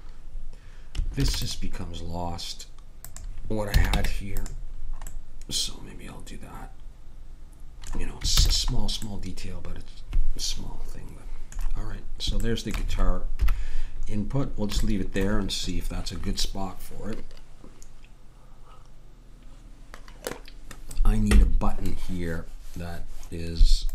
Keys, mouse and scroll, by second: 1.2 ctrl+r, 3.7 a, 4.0 Tab, 8.4 ctrl+s, 13.4 KP_1.